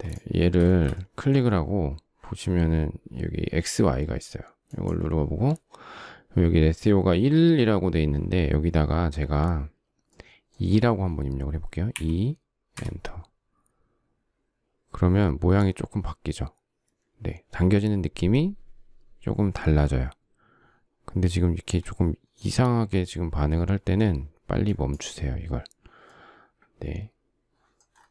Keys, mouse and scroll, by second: 0.3 shift+middle click, 11.5 2, 12.4 Return.